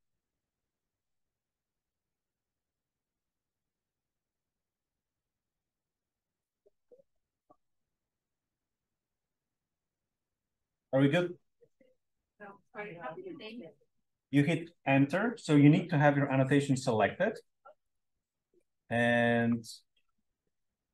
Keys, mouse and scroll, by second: 0.6 click, 5.8-6.4 drag, 17.8 click, 19.3 click, 19.9 click.